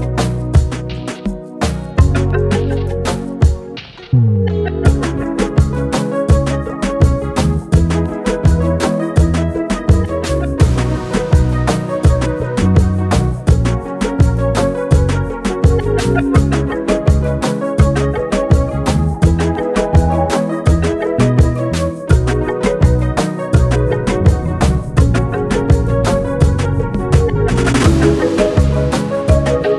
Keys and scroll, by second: 9.0 Tab, 9.2-10.6 typing, 27.3-29.2 typing.